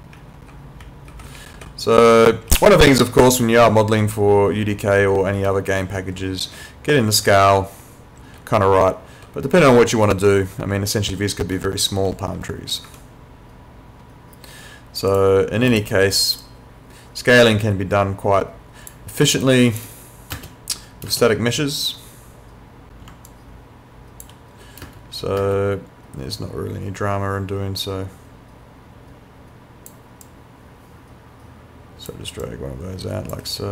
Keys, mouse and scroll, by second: 0.2-2.8 typing, 4.4-7.8 typing, 8.9-10.7 typing, 12.1 s, 12.9 Escape, 15.1 click, 19.4 click, 20.3 space, 23.3 alt+click, 24.8 space, 26.4 click, 30.3 click.